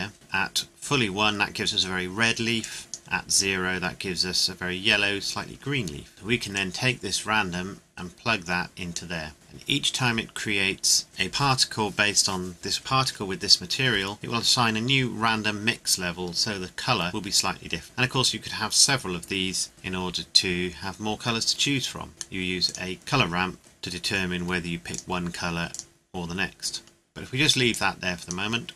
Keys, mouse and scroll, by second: 0.7 scroll up 1, 2.6 click, 5.5 scroll up 1, 6.1 scroll down 1, 6.5 click, 22.6 click, 24.9 click, 26.7 scroll down 1, 27.7 click, 28.7 scroll down 1.